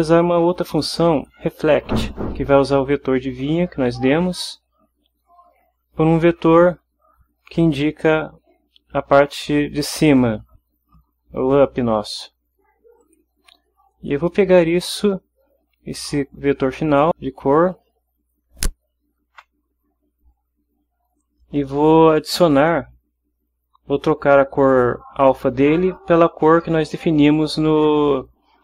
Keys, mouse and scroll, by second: 1.1 click, 13.0 click, 13.9 click.